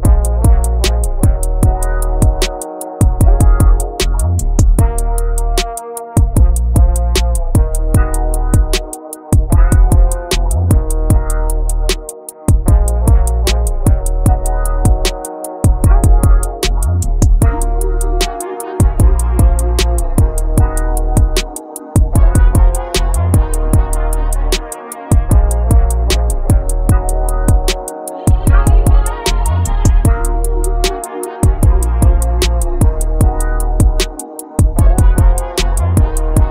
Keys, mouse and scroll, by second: 0.3 click, 1.0 click, 2.0 click, 2.4 click, 3.2 click, 4.3 click, 5.5 click, 6.3 click, 6.7 click, 7.3 click, 7.6 click, 8.3 click, 8.6 click, 9.1 click, 9.4 click, 9.8 click, 10.1 click, 10.3 click, 10.6 click, 10.9 click, 11.7 click, 12.1 click, 12.5 click, 12.9 click, 13.6 click, 13.8 click, 14.0 click, 14.9 shift+click, 15.2 shift+click, 15.8 scroll down 5, 16.1 ctrl+click, 16.3-16.8 scroll up 14, 17.1 m, 19.1 shift+click, 19.7 scroll up 6, 19.9 click, 20.0 click, 20.1 click, 20.2 shift+click, 20.5-20.9 scroll down 8, 20.9 m, 22.7 click, 22.8 scroll down 1, 22.9 middle click, 23.1 click, 23.8 shift+click, 24.0 scroll up 2, 24.3-24.8 scroll down 15, 24.8 m, 26.3 click, 26.4 scroll down 3, 26.9 scroll up 2, 27.4 click, 27.6 click, 30.1 click, 30.4 click, 31.6 click, 32.0 click, 32.8 click, 33.0 shift+click, 33.5 ctrl+l, 33.7 ctrl+z, 35.1 click, 36.0 click, 36.2 click.